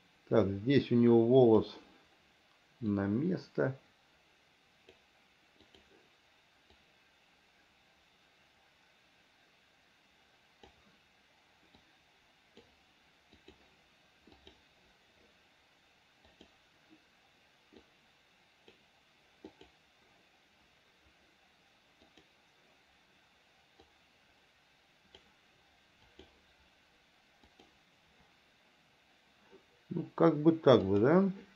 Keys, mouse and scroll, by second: 3.1-5.2 drag, 5.9 click, 7.0-11.0 drag, 12.0 click, 13.7 click, 14.7 click, 16.6 click, 18.1 click, 19.8 click, 22.4 click, 24.2-25.4 drag, 26.4 click, 27.7 click, 31.2 click.